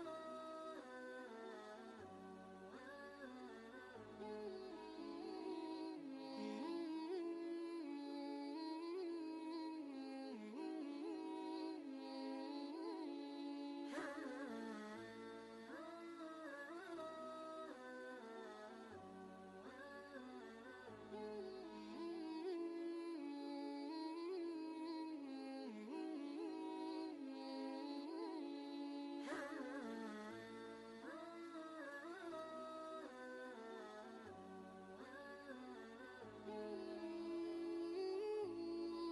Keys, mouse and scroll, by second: 5.0 click, 7.6 ctrl+a, 8.9 a, 10.1-12.4 typing, 13.5 Down, 14.7 space, 16.6 Down, 18.2 Up, 18.7 Return, 20.9 click, 22.9 right click, 23.9 click, 25.0 alt+Tab, 26.3 ctrl+v, 27.1 ctrl+space, 27.2 ctrl+click, 27.7 ctrl+space, 28.2-29.8 drag, 33.1 click, 34.2 ctrl+shift+g, 35.0 y, 35.9 click, 38.6-39.1 drag.